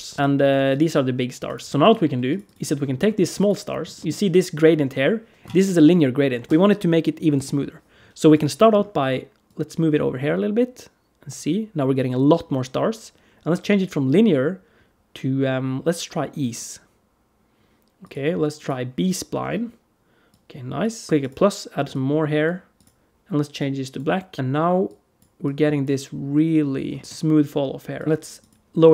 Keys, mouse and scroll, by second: 0.1 BackSpace, 0.1 F2, 0.1 click, 0.1 g, 1.7 click, 1.9 g, 2.3 click, 2.6 scroll up 1, 2.8 middle click, 3.2 click, 3.5-4.7 scroll up 6, 3.8 middle click, 8.1 click, 8.4 middle click, 9.3 click, 13.6 click, 17.8 click, 20.1 click, 21.0 click, 21.0 middle click, 21.0 scroll down 2, 21.7 click, 22.6 click, 24.7 click, 25.3 click, 26.7 scroll down 2, 26.9 middle click, 27.0 click, 27.8 click, 28.1 click, 28.2 click.